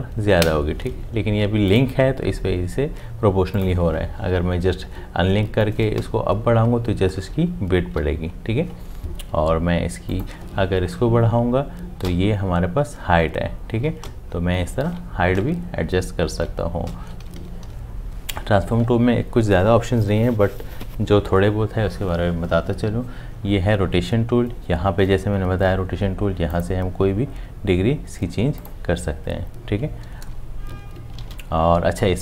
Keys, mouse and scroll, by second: 6.0 Up, 12.1 Up, 16.8 Down, 31.2 ctrl+z.